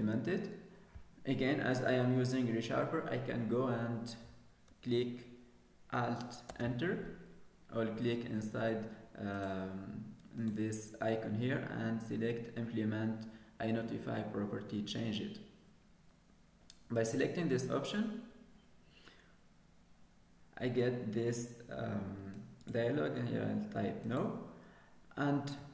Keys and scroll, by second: 7.1 alt+Return.